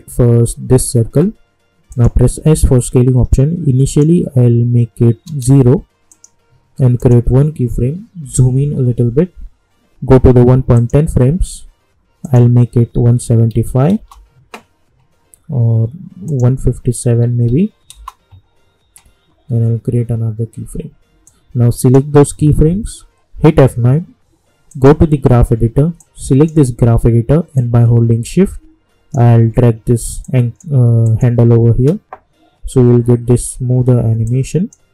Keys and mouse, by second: 1.9 click, 2.4 s, 3.9 click, 6.1 click, 8.2 =, 8.5 =, 10.7 click, 13.9 Return, 16.2 click, 17.9 Return, 21.2-23.4 drag, 23.4 F9, 24.7-27.5 drag, 28.0-28.4 shift+drag, 30.2 click, 31.7 space, 34.2-34.9 drag.